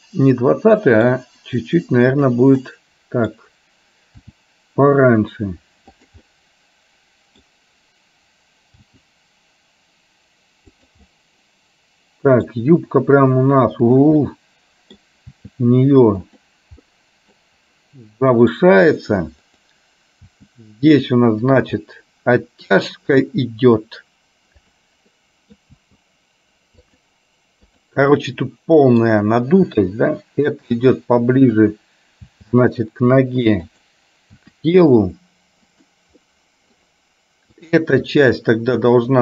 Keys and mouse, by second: 2.3 click, 2.7 middle click, 4.3 r, 6.3-7.5 middle drag, 8.9 g, 11.2-12.5 middle drag, 14.0 click, 14.4 middle click, 16.9 middle click, 18.3 middle click, 19.7 click, 20.3 g, 21.8 middle click, 25.3 middle click, 27.7 click, 28.3 middle click, 29.8 g, 31.5 click, 32.5 g, 34.5 r, 36.3 middle click, 38.2 r.